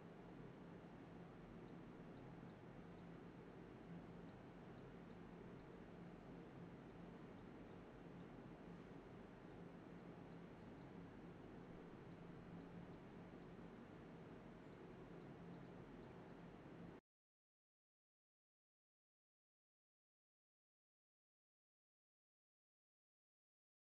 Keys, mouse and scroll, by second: 0.9 alt+click, 1.1 alt+click, 1.2 alt+click, 2.5 alt+click, 3.0-4.1 typing, 3.4 ctrl+b, 4.4 double click, 4.9 alt+click, 6.2 alt+click, 6.5 alt+click, 6.7 alt+click, 6.8 alt+click, 7.5 alt+click, 9.8 typing, 10.5 ctrl+b, 11.3 alt+click, 13.8 alt+click, 14.0 alt+click, 21.8 alt+click, 21.8 alt+click.